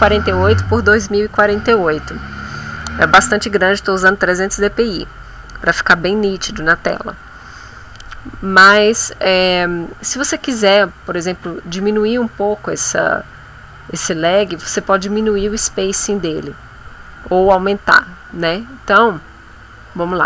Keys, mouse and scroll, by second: 3.4-4.5 drag, 5.0 click, 19.9 F5.